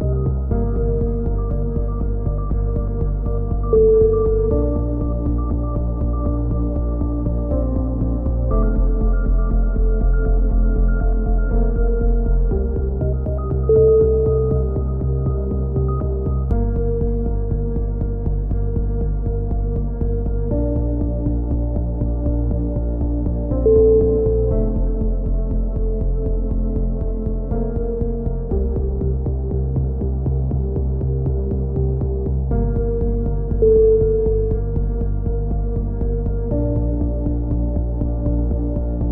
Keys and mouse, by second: 5.0-6.2 right drag, 5.9 middle click, 6.3 z, 13.3-15.9 middle drag, 14.4 z, 15.9-16.9 drag, 17.5 click, 21.7 a, 21.8-22.8 middle drag, 22.1 z, 23.9-28.2 middle drag, 24.3 z, 28.5-29.8 middle drag, 33.7 k, 36.2 a, 37.3-39.0 drag, 39.0 middle click.